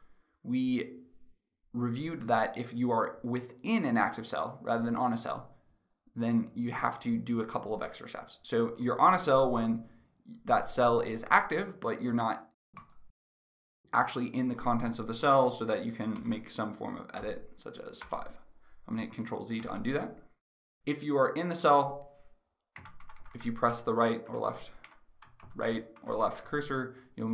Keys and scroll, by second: 17.6 Return, 19.3 ctrl+z, 22.4 Left, 23.0 Left, 23.8 Right, 24.4 Left, 25.1 Right, 25.5 Left.